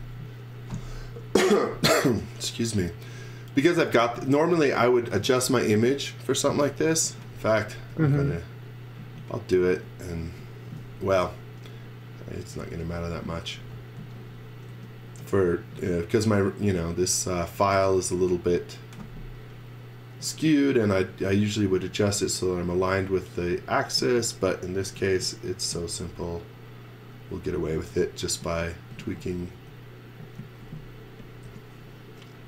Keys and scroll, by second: 7.0 z, 7.7 space, 11.7 s, 12.3 space, 14.0 z, 14.6 s, 24.8 m, 27.7-30.3 typing, 31.4 l.